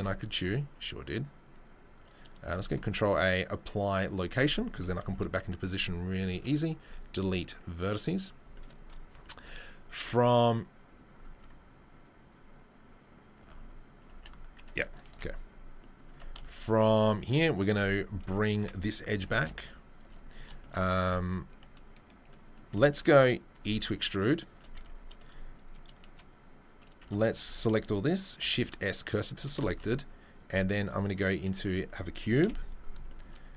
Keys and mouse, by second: 2.7 ctrl+a, 5.0 g, 6.1 click, 6.8 Delete, 9.8-33.5 middle drag, 11.3 Tab, 14.1 alt+g, 15.2 ctrl+z, 16.1 Tab, 17.8 2, 19.1 g, 21.0 3, 22.7 a, 23.5 e, 24.7 Tab, 27.0 Tab, 27.4 a, 28.4 shift+s, 29.4 Tab, 29.7 shift+a, 32.4 KP_7.